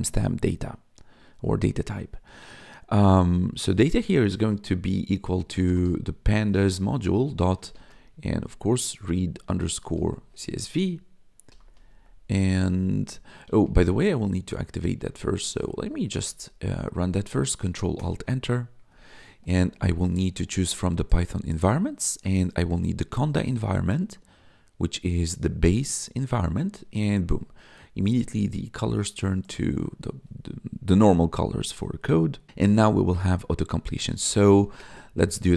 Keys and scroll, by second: 5.4-11.9 typing, 13.4 BackSpace, 15.6 BackSpace, 17.9 ctrl+alt+Return, 33.9-35.5 typing.